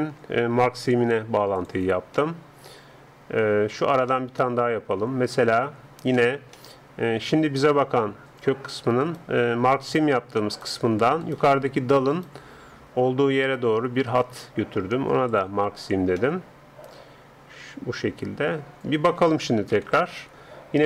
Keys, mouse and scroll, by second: 1.6-3.3 drag, 2.2-8.3 middle drag, 8.3-9.1 scroll up 1, 9.1-15.9 right drag, 15.3-17.3 drag, 16.3 middle click, 17.3 middle click, 19.7 ctrl+Up.